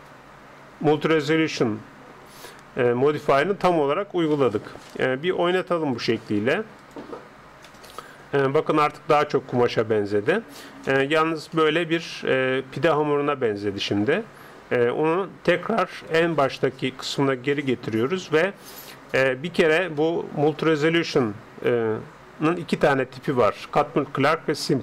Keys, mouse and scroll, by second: 0.7-1.1 scroll up 1, 1.1-2.7 middle drag, 5.3 middle click, 5.9-8.5 drag, 6.0-7.0 middle drag, 7.8-9.4 middle drag, 11.0-12.7 middle drag, 16.2-18.6 drag, 17.6-19.3 middle drag, 20.0-21.7 middle drag.